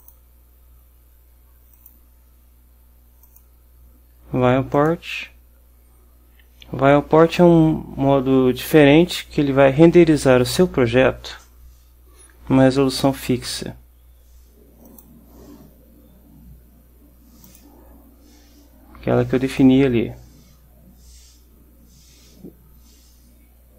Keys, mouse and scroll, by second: 0.1 click, 1.8 click, 3.3 click, 4.9 click, 14.9 click, 17.5 click, 19.7-22.1 drag, 22.2-23.7 drag.